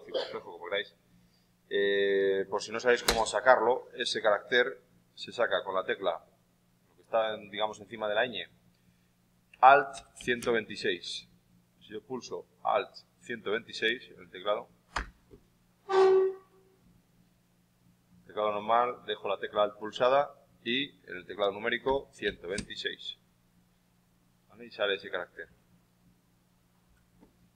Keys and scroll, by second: 9.9 alt+KP_1, 10.1 alt+KP_2, 21.8 alt+KP_1, 22.1 alt+KP_2, 22.5 alt+KP_6, 25.3 shift+Left.